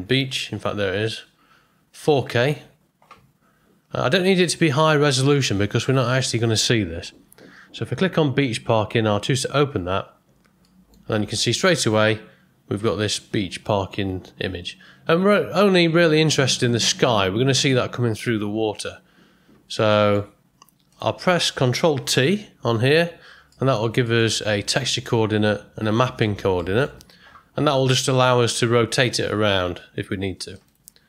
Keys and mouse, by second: 10.6 middle click, 11.6-16.8 middle drag, 20.1 middle click, 22.9 ctrl+t, 23.5 middle click, 26.1 middle click, 26.7 ctrl+middle click, 28.4-30.7 drag.